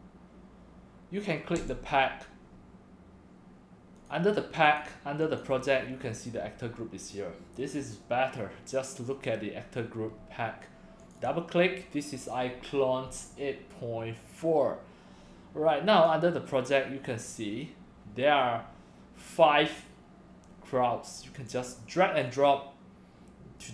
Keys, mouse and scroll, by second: 1.6 click, 4.0 click, 4.6 click, 5.2 click, 11.0 click, 11.2 click, 16.0 click, 21.5-23.6 drag.